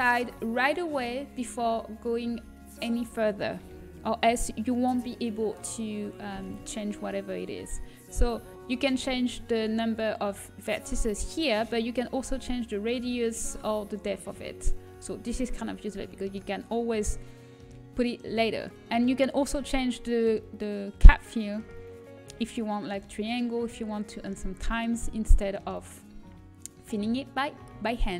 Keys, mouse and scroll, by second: 0.1 Delete, 7.0 shift+a, 9.8-16.5 drag, 21.2-23.2 drag.